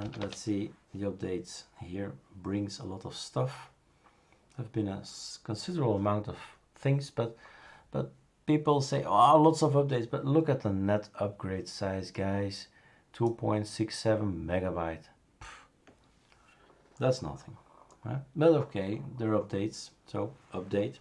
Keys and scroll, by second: 0.0-0.5 typing.